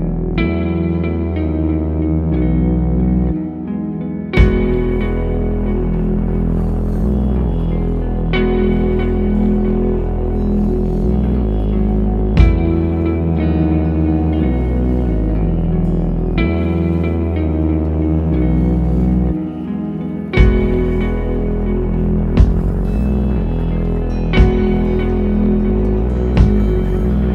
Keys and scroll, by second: 1.4 super+z, 3.3 super+z, 5.8 space, 23.0 super+z, 24.9 space.